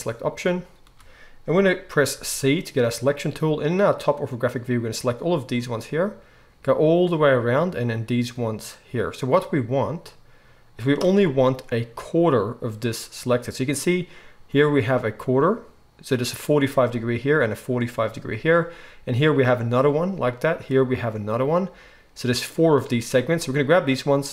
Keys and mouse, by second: 0.8 alt+a, 2.1 c.